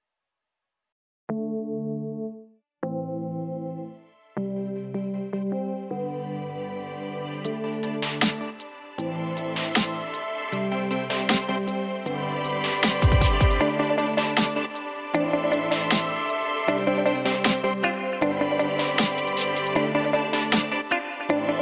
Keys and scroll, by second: 5.5 ctrl+alt+shift+e, 10.3 BackSpace, 10.7 o, 13.5-15.8 typing.